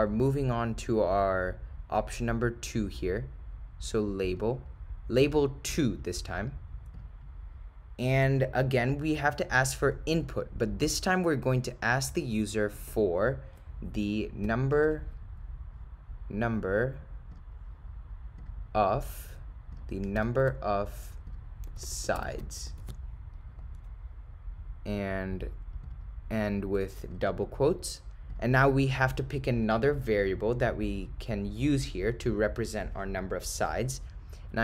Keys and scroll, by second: 0.3 Left, 4.4 9, 5.8 2, 7.0 Return, 9.3 Right, 10.2 Return, 14.8 7, 17.4 ., 19.8 0, 20.2 7, 21.3 0, 25.9 ., 26.4 0, 29.7 ,.